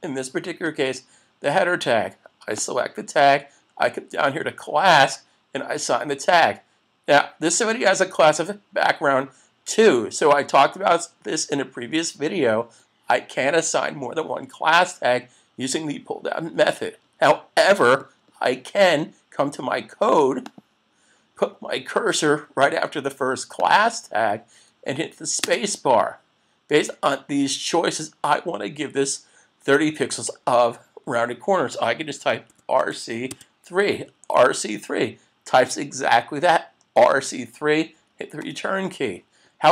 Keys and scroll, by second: 38.4 Return.